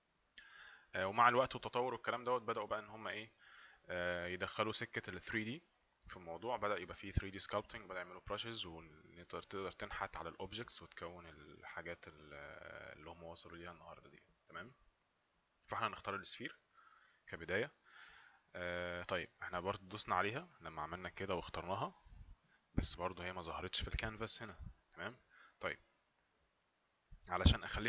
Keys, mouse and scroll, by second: 20.5 click, 24.2 click.